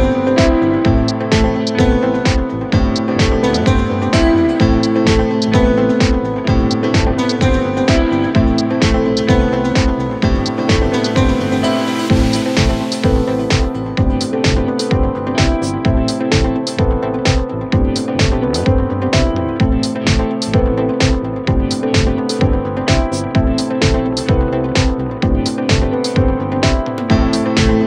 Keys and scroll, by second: 0.4 ctrl+Page_Down, 1.1 shift+Page_Down, 1.9 c, 2.8 Escape, 4.5 shift+Page_Up, 6.6 shift+Page_Down.